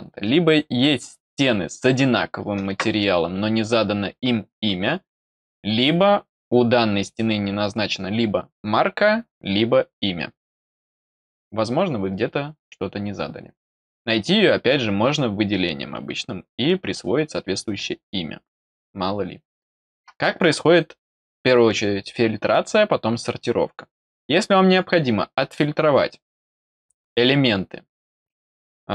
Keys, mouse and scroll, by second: 25.3 click.